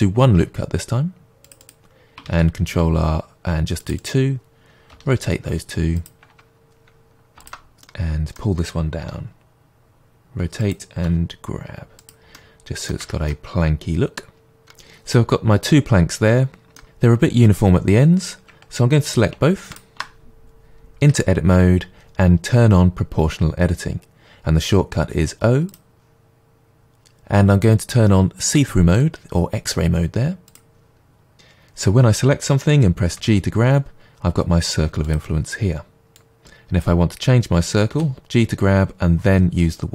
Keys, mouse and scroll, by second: 1.6 click, 2.2 ctrl+r, 4.0 click, 4.9 r, 6.0 click, 7.4 alt+click, 7.8-10.7 middle drag, 9.0 r, 10.7 click, 11.0 middle click, 11.0 g, 12.0 click, 12.3-19.7 middle drag, 13.0 Tab, 19.7 shift+click, 21.1 Tab, 25.7 click, 30.4 click, 33.2 g, 35.1 click, 36.1 click, 37.9 g.